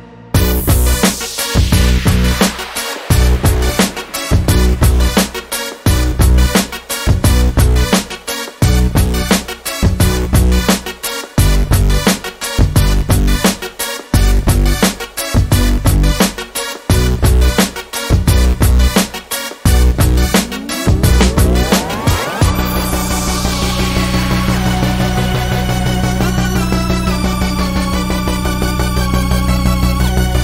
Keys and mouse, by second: 1.0 middle click, 1.6-3.7 middle drag, 6.9 middle click, 14.3-15.3 middle drag, 15.4-18.6 middle drag, 18.6 drag, 20.1 Tab, 21.0 Tab, 21.3 a, 22.9 KP_1, 25.7 shift+d, 29.0 Tab, 29.9-30.4 drag.